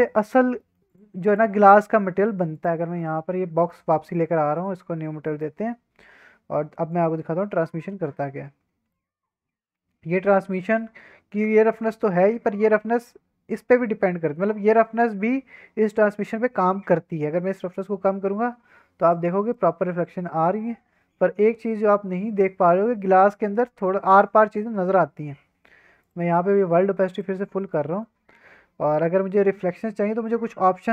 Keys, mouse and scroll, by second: 0.6 middle drag, 0.9 click, 1.1 x, 1.5 shift+a, 3.0 middle drag, 3.2-3.9 scroll up 4, 3.6 shift+middle drag, 3.9 middle drag, 4.5 click, 5.0 scroll up 1, 5.2 shift+middle drag, 5.5-6.9 scroll down 1, 6.9-8.2 drag, 8.9-9.8 middle drag, 10.2 middle click, 14.1-14.5 scroll down 2, 14.5-17.2 scroll up 1, 17.7-19.2 drag, 19.5-21.5 middle drag, 21.5 scroll down 1, 21.8-23.3 middle drag, 23.3-23.6 scroll up 2, 23.6-24.1 middle drag, 24.3 scroll down 1, 24.7 middle drag, 25.0 scroll up 1, 26.0-27.3 drag, 27.6 shift+middle click, 27.9 middle drag, 30.2-30.9 scroll down 8.